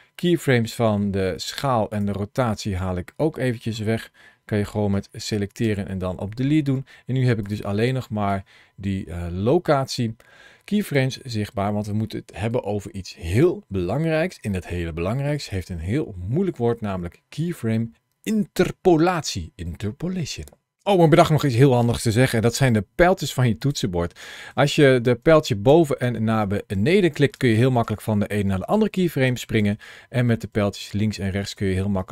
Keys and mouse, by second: 5.5 Delete, 7.3 click, 8.1-10.8 drag, 24.5 Up, 24.9 Up, 25.8 Down, 26.2 Down, 27.0 Up, 27.0 Down, 27.2 Up, 27.6 Down, 27.9 Down, 28.5 Up, 28.8 Up, 29.1 Down, 29.4 Down, 29.7 Left, 30.1 Right, 30.3 Right, 30.7 Right, 30.9 Left, 31.1 Left, 31.3 Left, 31.4 Right, 31.6 Right, 32.0 Right.